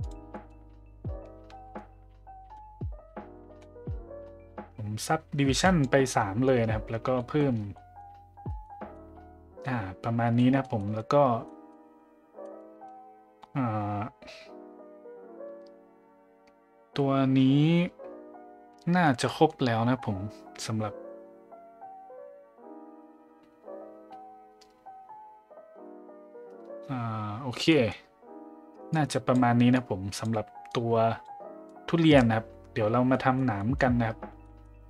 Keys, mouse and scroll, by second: 0.1 click, 0.4 middle click, 1.8-5.8 shift+drag, 7.1 middle drag, 7.7 middle drag, 8.5 middle click, 8.9-9.6 middle drag, 10.4 middle drag, 10.8 middle drag, 11.4 middle drag, 12.4 middle click, 19.3 middle click, 27.8 middle drag, 28.9-29.4 drag, 29.7-30.2 drag, 30.8-31.3 drag, 31.6-32.2 drag, 33.1 middle drag, 33.6 middle drag, 34.4 middle drag, 34.4 a, 34.7 a.